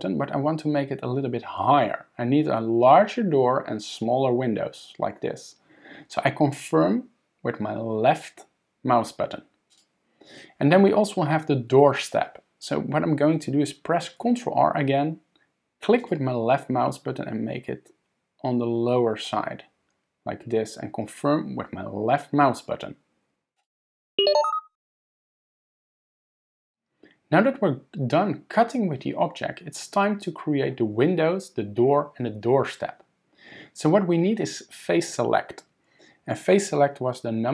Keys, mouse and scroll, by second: 14.2 ctrl+r.